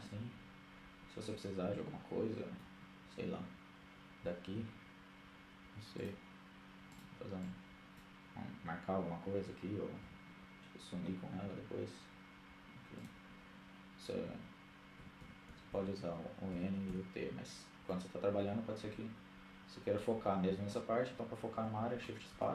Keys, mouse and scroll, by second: 3.3 t, 5.1-7.6 drag, 9.6 n, 10.5-12.8 middle drag, 10.5-11.2 scroll up 1, 12.1-12.6 scroll down 1, 12.6-13.9 drag, 14.6-16.7 typing, 17.6-19.2 middle drag, 22.1 shift+space.